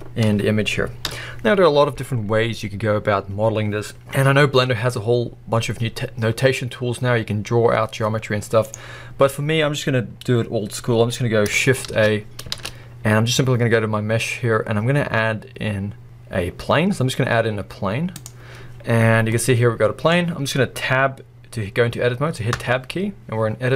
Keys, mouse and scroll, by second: 1.0 KP_1, 2.1-4.2 scroll up 1, 4.2-5.9 scroll down 1, 5.9-6.8 scroll up 1, 6.8-8.6 scroll down 2, 8.3-8.6 middle drag, 8.6 click, 9.1-11.8 scroll up 1, 11.9 shift+a, 12.5 shift+a, 18.8-19.3 scroll down 1, 19.3-22.6 middle drag, 20.4-22.5 scroll up 1, 22.5 scroll up 1, 22.6 Tab.